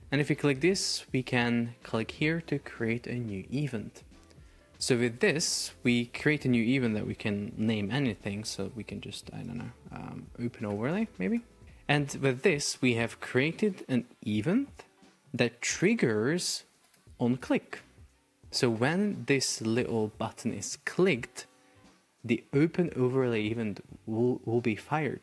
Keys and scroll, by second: 8.7 shift+n, 9.0 BackSpace, 10.5 shift+o, 10.9 space, 11.1 shift+o, 11.6 Return.